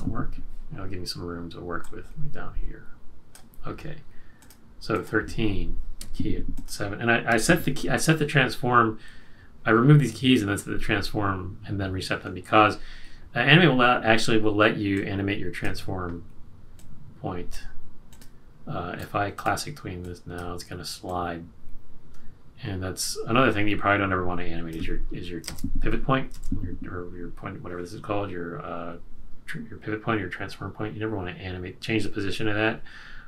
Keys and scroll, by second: 6.0 F6, 25.4 super+z, 26.3 super+z.